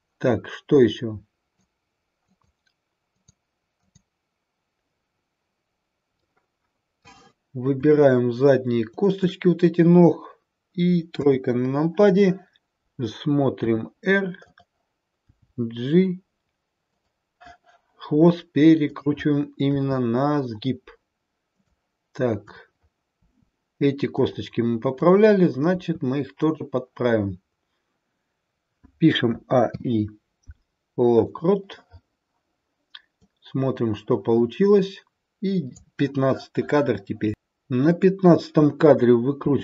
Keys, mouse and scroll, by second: 0.6 click, 2.2 click, 3.1 click, 3.7 click, 6.2 middle click, 8.9 shift+click, 11.1 KP_3, 13.5 r, 15.2 g, 18.8 click, 19.7 r, 22.3 click, 23.1 r, 24.8 click, 25.6 r, 29.3 a, 29.5 i, 33.2 click, 37.8 click, 39.3 r.